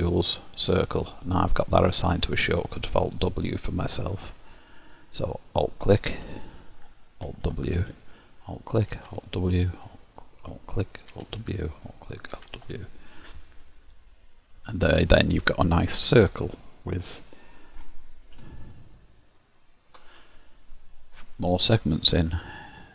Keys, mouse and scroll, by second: 5.5 alt+click, 7.3 alt+w, 8.5 alt+click, 9.0 alt+w, 9.8 click, 10.6 alt+click, 11.2 alt+w, 12.0 alt+click, 12.4 alt+w, 13.0 middle click, 19.6 ctrl+alt+click.